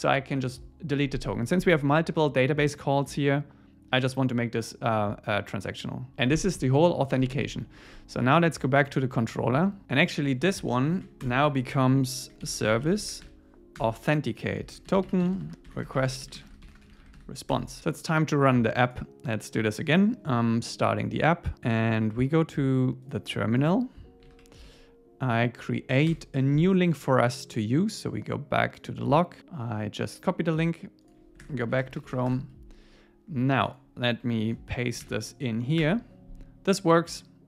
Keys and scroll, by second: 10.9 shift+super+Left, 11.5 Tab, 13.8 Return, 17.5 ⟲, 17.8 super+s, 24.3 ctrl+c, 24.7 Up, 26.1 Return, 32.3 Return, 34.4 super+a, 35.1 super+v, 35.8 Return.